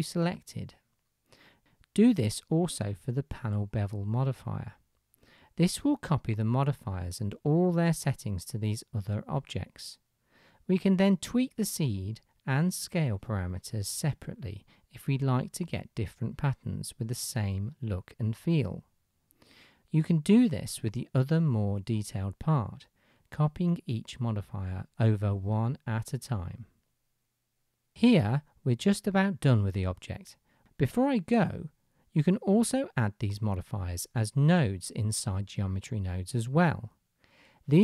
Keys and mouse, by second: 6.3-18.2 drag, 10.7-20.1 middle drag, 10.7-18.2 right drag, 20.1-21.6 drag, 21.6 shift+middle click, 21.7 shift+click, 22.6-29.5 middle drag, 29.5 click.